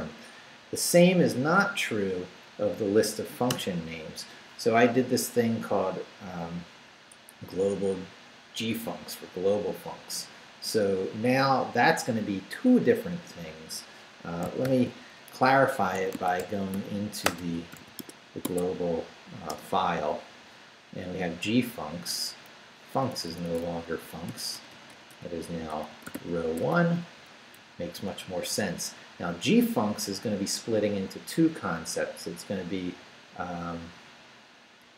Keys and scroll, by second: 3.5 Return, 14.6 shift+;, 15.9-18.3 typing, 19.5 Return, 21.2 Down, 22.5 Up, 22.9 Right, 24.3 i, 24.5 BackSpace, 25.6-27.0 typing, 27.1 Down, 27.5 Right.